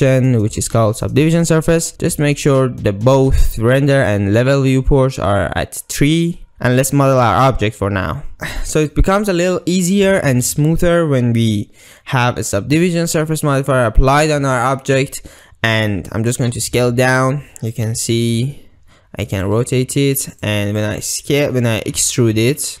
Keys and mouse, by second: 1.9 ctrl+3, 6.1 click, 10.2 Tab, 16.5 s, 18.3 r, 19.6 g, 20.9 click, 22.0 e.